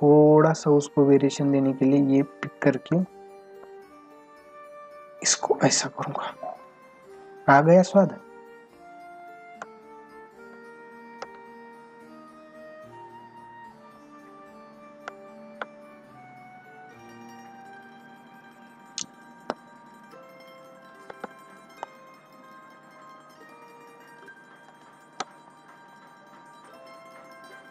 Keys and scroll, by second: 11.2 ctrl+alt+z, 18.3 ], 21.1 ctrl+alt+z, 24.7 space.